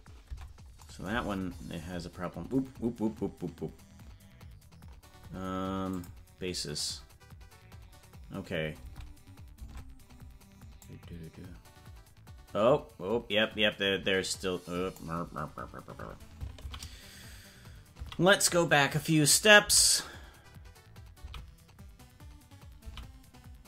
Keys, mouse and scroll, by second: 0.3 Tab, 1.2-1.8 scroll down 16, 4.8 scroll up 2, 5.9 scroll up 7, 6.0 click, 8.8 Tab, 10.9-15.0 drag, 19.3 ctrl+z.